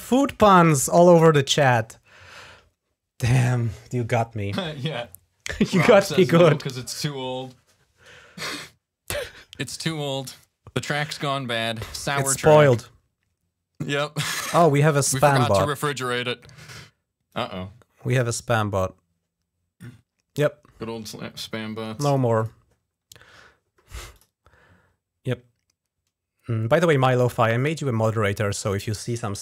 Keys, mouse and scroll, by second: 15.0 click, 17.1 click, 20.8 click, 21.8 click, 22.1 click, 23.9 click.